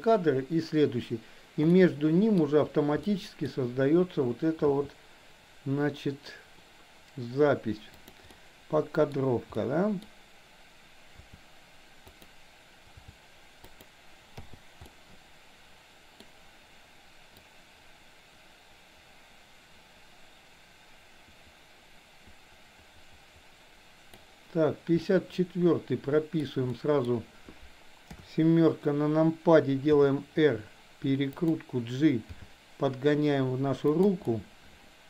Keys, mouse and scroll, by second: 1.8-2.4 middle drag, 3.0-3.4 middle drag, 4.8 g, 8.4-9.1 middle drag, 9.6-10.0 middle drag, 11.3 r, 13.0 g, 14.4 i, 14.9-16.3 middle drag, 17.4-24.3 drag, 25.0-26.4 middle drag, 26.8 middle drag, 28.3 KP_7, 29.9 r, 32.4 g, 34.3-35.0 middle drag.